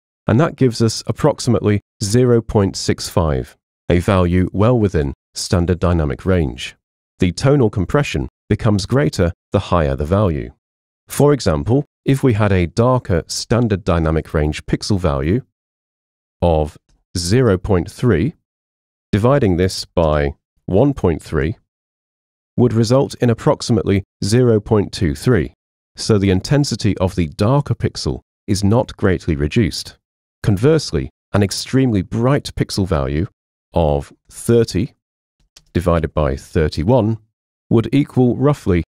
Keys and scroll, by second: 15.9 super+a, 16.4 0, 17.0 ., 17.3 3, 18.9-21.5 typing, 23.5 3, 32.2 super+a, 33.7-36.4 typing.